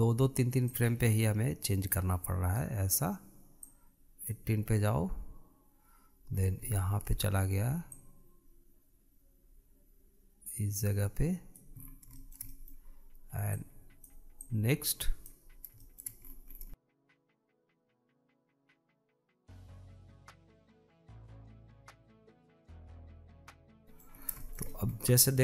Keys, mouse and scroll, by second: 0.1-1.9 drag, 4.9-7.5 drag, 7.5 scroll up 3, 7.8-9.1 shift+middle drag, 9.1 click, 13.0 scroll down 4, 13.4-14.7 shift+middle drag, 14.7 click, 15.7-16.7 drag, 16.7 middle click, 17.0 click, 17.7 click, 18.5 click, 19.2 click, 19.4 shift+middle click, 19.8 scroll down 2, 19.9 middle click, 20.0 click, 20.2 scroll up 4, 20.8 scroll down 1, 20.8 shift+middle click, 21.0 click, 21.1 shift+middle click, 21.3 scroll up 1, 22.0 scroll down 3, 22.1 shift+middle click, 22.2 click, 22.4 scroll up 2, 22.5 shift+middle click, 22.6 click, 23.0 scroll down 1, 23.1 shift+middle click, 23.2 click, 23.3 scroll up 2, 23.4 shift+middle click, 23.5 click, 23.8-24.1 scroll down 3, 24.1-25.4 shift+middle drag.